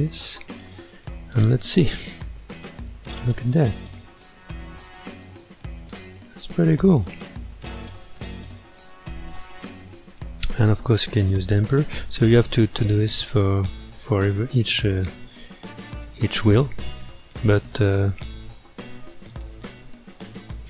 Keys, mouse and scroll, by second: 0.8-1.7 middle drag, 1.7 scroll down 2, 2.1 space, 7.8-10.8 middle drag, 11.0-11.9 drag, 13.5-14.0 scroll up 3, 14.0-14.7 middle drag, 14.7-15.3 scroll up 2, 15.5-17.5 middle drag, 17.5 scroll up 1, 17.9-20.6 middle drag.